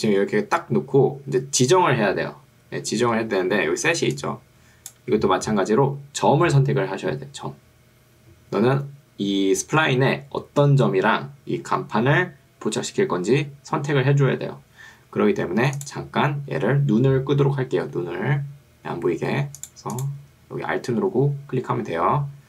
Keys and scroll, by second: 4.0 ctrl+2, 5.2 ctrl+Escape.